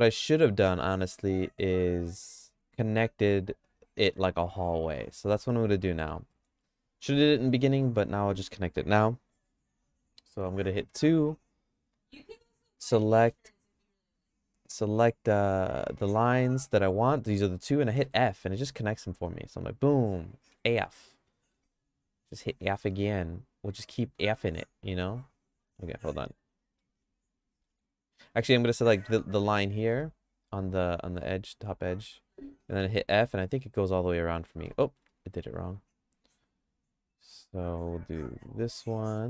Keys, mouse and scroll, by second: 5.0 middle click, 5.4 shift+middle click, 6.3 middle click, 6.7 shift+middle click, 7.5 middle click, 10.8 2, 12.2 click, 13.2 middle click, 13.6-15.8 shift+middle drag, 18.0 f, 20.5 f, 20.8 middle click, 21.2 middle click, 21.8 click, 22.3 click, 22.9 click, 23.3 click, 24.2 shift+click, 25.4 click, 26.3 click, 27.3 shift+click, 27.9 click, 29.8 middle click, 30.2-31.2 shift+middle drag, 32.6 f, 33.0 f, 33.3 middle click, 33.7 f, 34.5 ctrl+z, 34.8 middle click, 35.2-37.4 shift+middle drag, 38.2 click.